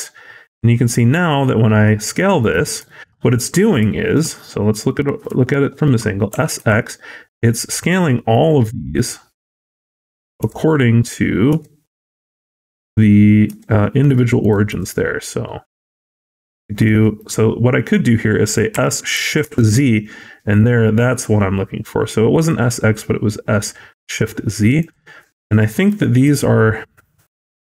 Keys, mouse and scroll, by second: 2.5 scroll down 2, 2.7 shift+middle click, 3.0 scroll up 3, 3.3 middle click, 3.6 scroll down 1, 3.8 shift+middle click, 4.0-4.6 shift+scroll up 3, 4.7 middle click, 5.3 shift+middle click, 6.2 s, 14.6 s, 25.0 scroll down 3, 25.3 middle click, 25.6-26.5 scroll up 4, 25.9 shift+middle click, 26.5 scroll down 1, 26.8 middle click, 27.4 Tab, 27.6 scroll down 2.